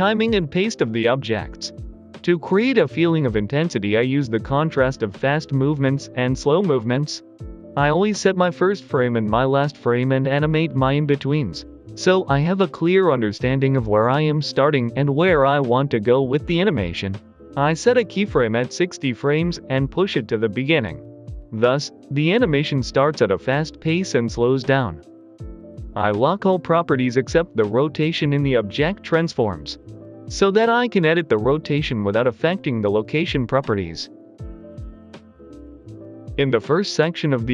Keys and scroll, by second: 1.4 typing, 5.3 g, 5.5 Return, 6.7 g, 6.7 x, 8.3 g, 8.3 x, 11.5-12.2 typing, 15.1 g, 15.2 x, 16.3 x, 17.1 g, 27.2 Delete, 28.2 r, 28.3 Return, 30.2 typing, 36.7 typing, 37.3 Escape.